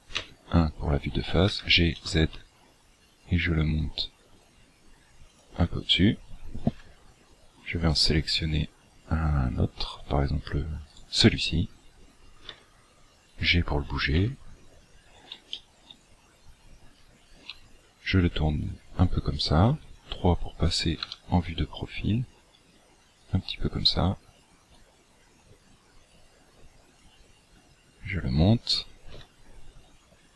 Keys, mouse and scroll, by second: 0.1 KP_1, 1.4 g, 6.7 KP_7, 7.5-8.0 scroll down 10, 10.9 right click, 12.5 g, 14.1 KP_1, 15.1-15.4 scroll up 5, 15.4 shift+middle click, 16.0 scroll up 1, 16.2 scroll down 1, 17.5 r, 19.7 KP_3, 21.0 r, 24.7 click, 26.1 click, 29.1 KP_1.